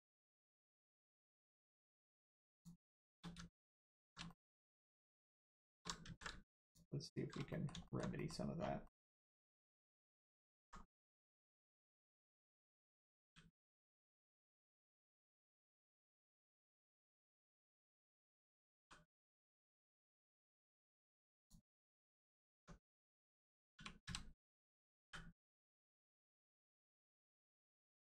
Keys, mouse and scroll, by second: 0.6 alt+click, 1.3 middle click, 1.4 middle click, 2.5 alt+shift+click, 3.6 alt+shift+click, 4.2 alt+middle click, 4.3 middle click, 5.2 alt+shift+click, 5.9 ctrl+alt+click, 6.0 ctrl+z, 6.6 alt+shift+click, 7.5 alt+middle click, 7.8 alt+middle click, 8.1 middle click, 8.6 scroll down 1, 8.8 middle click, 10.4 alt+middle click, 10.6 scroll up 1, 11.2 middle click, 13.2 g, 13.6 middle click, 15.6 right click, 16.2 click, 18.8 g, 21.4 click, 22.0 middle click, 22.3 scroll down 1, 22.5 Tab, 23.7 1, 24.0 a, 25.8 click, 26.2 middle click, 26.6 scroll up 1, 27.4 shift+middle click, 27.7 middle click.